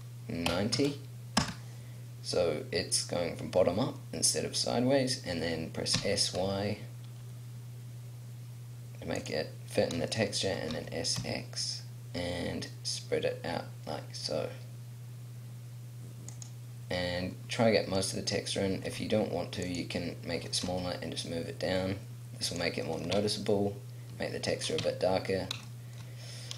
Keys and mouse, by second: 6.0 s, 10.7 s, 16.4-21.1 drag, 18.8 s, 20.3 g, 22.6 click, 23.1 Tab, 24.8 Tab.